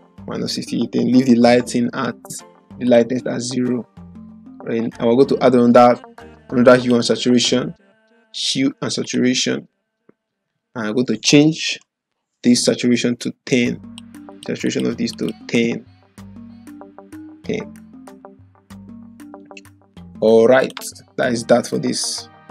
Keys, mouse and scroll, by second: 2.8 click, 6.8 click, 13.5-14.1 click, 17.7-18.7 typing, 20.6 click.